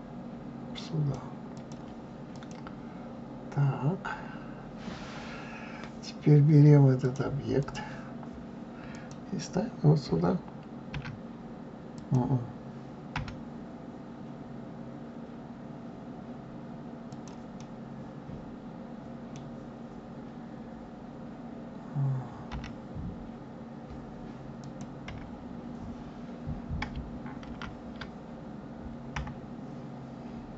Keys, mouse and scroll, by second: 2.3 click, 6.9-9.0 drag, 10.9 s, 13.1 g, 17.5-20.5 middle drag, 22.4 g, 25.0 KP_1, 27.3 ctrl+z, 29.1 KP_3.